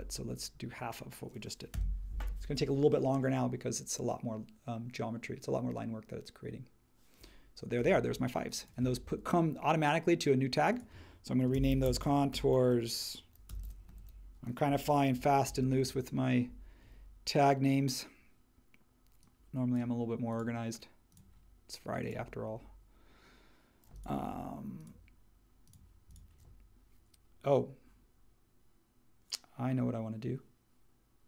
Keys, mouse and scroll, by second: 0.0-0.2 typing, 1.7 Return, 11.3-15.8 typing.